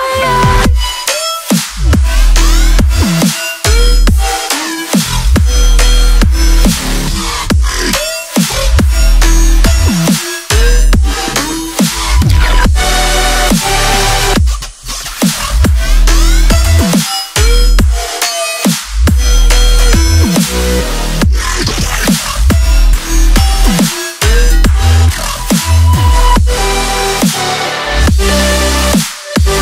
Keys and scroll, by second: 11.6 alt+a, 12.9 ctrl+a, 13.1 ctrl+n, 13.8 ctrl+l, 14.4 ctrl+a, 15.9 ctrl+n.